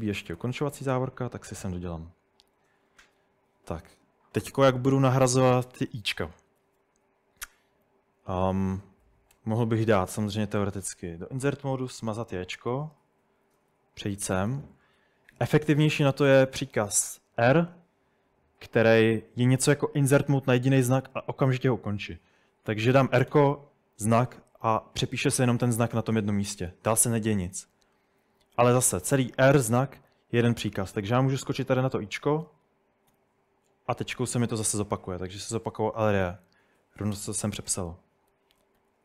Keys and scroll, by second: 0.0-2.5 typing, 0.4 Tab, 0.5 Tab, 1.4 Escape, 5.1-6.6 typing, 9.3 i, 10.1 s, 11.9 Delete, 12.4 j, 12.7 Escape, 13.6 l, 13.7 l, 13.9-14.4 l, 17.4 r, 23.3 j, 30.9-33.1 typing, 36.6-38.8 typing.